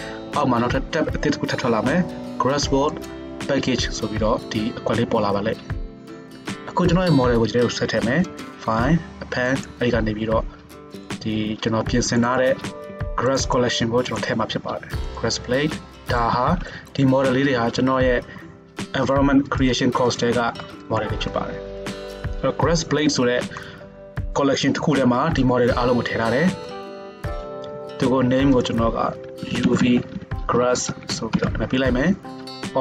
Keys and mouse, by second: 0.0 click, 0.2-3.1 middle drag, 3.1 click, 3.3-8.3 middle drag, 8.3-19.7 drag, 19.7-21.0 middle drag, 21.0 click, 21.3-21.8 middle drag, 21.8 drag, 21.9 middle drag, 22.2-27.2 right drag, 27.2-28.6 shift+drag, 28.6-32.8 middle drag, 31.1 s.